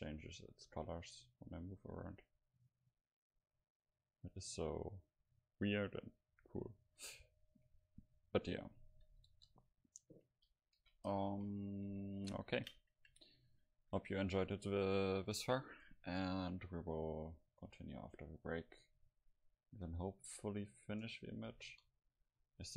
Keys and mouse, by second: 7.0-9.3 middle drag, 9.3 KP_0, 10.5 a, 10.8 a, 11.3 ctrl+s, 11.6 middle click, 18.7-21.8 middle drag, 21.6 KP_0.